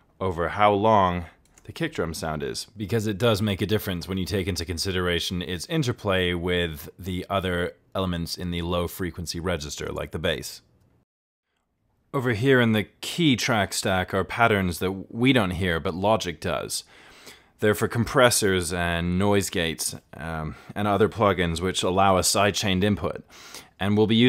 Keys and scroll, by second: 0.4 super+z, 1.1 ctrl+z.